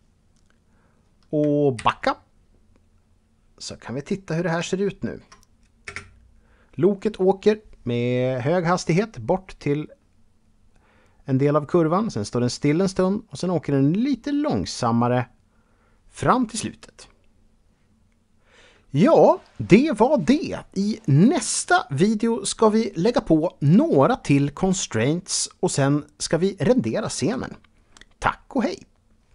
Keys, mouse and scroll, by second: 1.3 shift+Left, 2.6-3.1 scroll down 1, 3.4 middle click, 4.5 shift+middle click, 5.4 space.